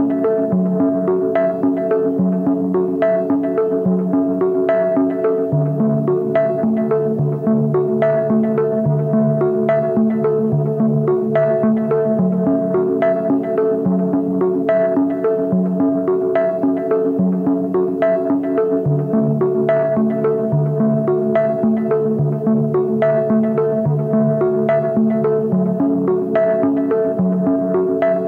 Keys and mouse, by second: 0.0-0.3 drag, 0.6 shift+drag, 1.6 ctrl+b, 5.2 ctrl+b, 18.6-20.4 drag, 20.4 Tab, 20.8 a, 21.4 q, 25.3 ctrl+s, 25.7-26.0 drag, 26.5 click, 26.9 shift+drag, 27.4 Tab.